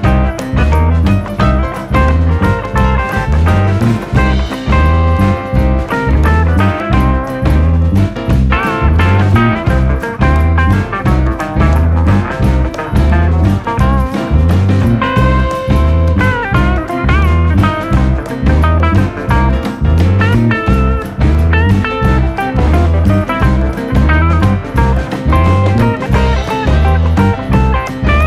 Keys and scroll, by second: 1.5-2.7 typing, 4.9 r, 8.8-9.9 typing, 14.3 p.